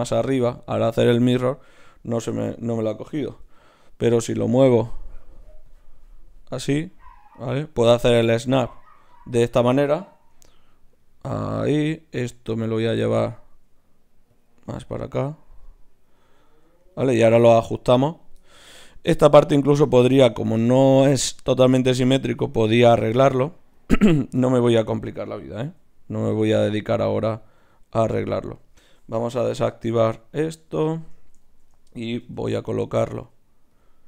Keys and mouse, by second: 3.4 g, 7.3-9.1 middle drag, 9.1-10.3 right drag, 10.3 g, 11.7-13.5 drag, 13.5 g, 14.9 g, 15.6-20.7 drag, 16.5 g, 17.5 g, 18.0-20.7 right drag, 24.0-25.6 right drag, 25.6 g, 27.6 g, 29.9 o, 30.4 o, 32.2 g, 33.0 click, 33.2 g.